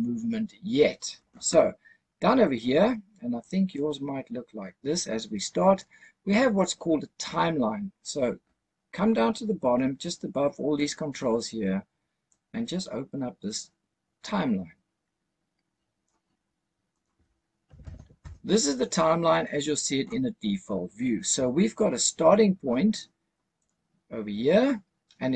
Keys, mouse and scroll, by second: 3.3-5.7 drag, 12.2-16.0 drag, 16.8-18.1 drag, 23.5 click.